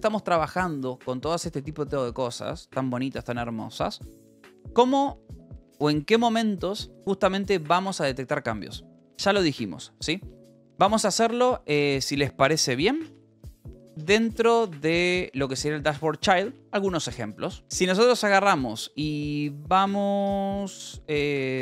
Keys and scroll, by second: 5.7 space, 12.4-15.7 typing, 17.4-18.3 typing, 20.2-21.6 typing.